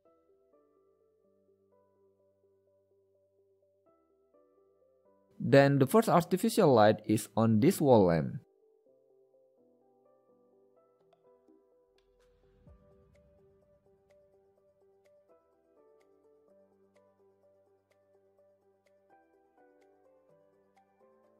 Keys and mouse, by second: 0.3 KP_7, 3.9 shift+a, 8.3 KP_3, 10.6 g, 12.1 middle drag, 13.0 g, 14.4 r, 16.8 g, 17.8 r, 18.7 click, 18.9 middle click, 19.0 click, 19.1 middle click, 19.5 g, 21.1 KP_1.